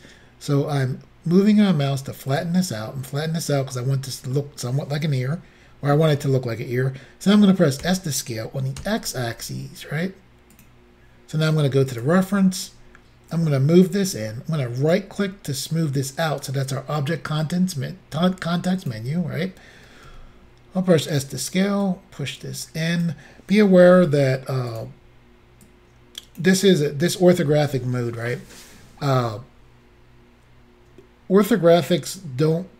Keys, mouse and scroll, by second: 2.3 click, 2.8 middle click, 7.8 s, 8.8 x, 10.6 click, 12.0 click, 13.4 click, 14.8 right click, 18.9 click, 20.1 s, 21.2 click, 21.9 click, 23.9 r, 24.8 click, 25.7 click.